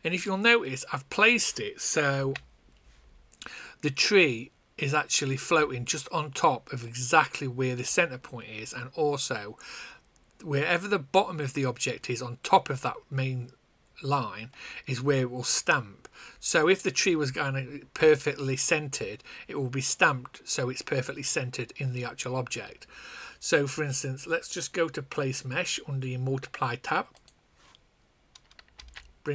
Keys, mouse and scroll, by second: 2.1 a, 6.8 click, 27.2 click, 28.7 n.